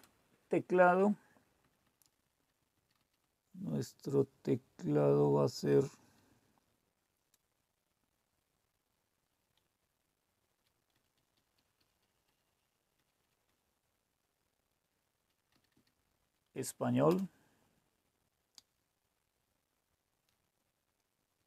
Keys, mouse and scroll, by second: 0.0 Return, 1.6 Down, 1.8 Down, 2.0 Down, 2.2 Down, 2.3 Down, 2.7 Down, 3.1 Down, 3.3-4.9 Down, 5.2 Down, 5.6 Down, 5.7 Down, 6.1 Down, 6.2-9.2 Down, 9.6-10.6 Up, 10.9 Up, 11.3 Up, 11.6 Up, 11.9 Up, 12.4 Up, 12.9 Up, 13.3 Up, 13.6 Up, 15.5 Down, 15.7 Down, 17.0 Return.